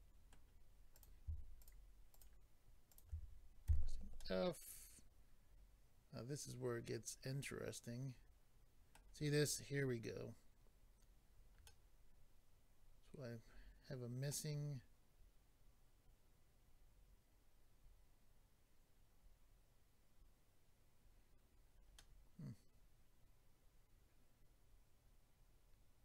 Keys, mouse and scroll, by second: 1.0 click, 1.6 shift+click, 2.1 shift+click, 2.9 shift+click, 3.7 f, 4.2 middle click, 11.7 middle click, 22.0 middle click.